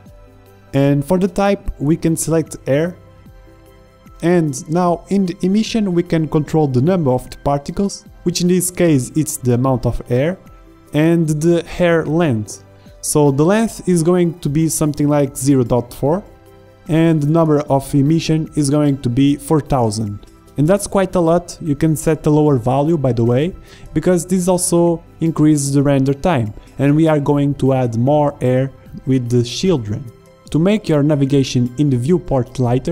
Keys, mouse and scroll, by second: 8.8-12.3 drag, 14.3-21.9 drag, 18.5 KP_0, 32.3-32.9 drag.